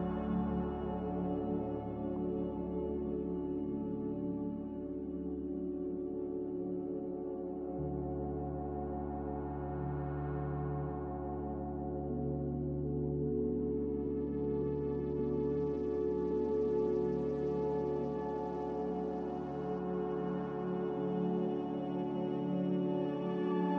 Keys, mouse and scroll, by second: 11.0 b, 12.1 Delete, 13.0 n, 15.3 n, 15.9 a.